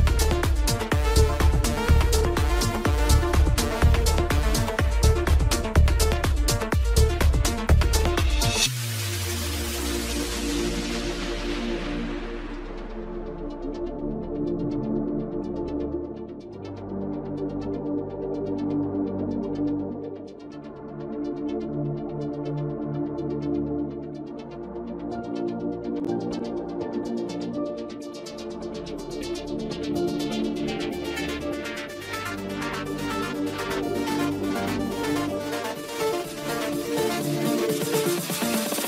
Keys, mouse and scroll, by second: 0.2 scroll down 1, 0.2 middle click, 1.0 scroll up 2, 1.2 shift+middle click, 1.5 s, 4.4 g, 5.0 scroll up 3, 5.1 shift+middle click, 5.3 scroll down 2, 5.4 middle click, 6.1 KP_7, 6.2 scroll down 1, 6.5 click, 9.0 middle click, 9.5 click, 10.2 KP_1, 10.4-11.0 scroll up 3, 11.6 middle click, 12.0 g, 12.6 scroll down 2, 12.6 middle click, 13.3 KP_1, 13.5-13.8 scroll up 2, 13.8 shift+d, 15.1 shift+click, 17.0-17.4 scroll down 4, 17.4 Tab, 18.6 click, 20.5-20.8 scroll down 2, 20.8-22.2 middle drag, 22.2-22.7 scroll up 2, 22.7-23.6 middle drag, 23.6 click, 24.4-27.6 drag, 27.6-28.0 scroll down 1, 28.0-30.9 middle drag, 31.4-31.8 scroll up 4, 31.8 Tab, 32.2 middle click, 33.1 alt+s, 35.1 middle click, 36.1 g, 37.0 scroll down 1, 37.2 middle click, 37.5 Tab, 37.8 scroll down 1, 38.0-38.8 middle drag.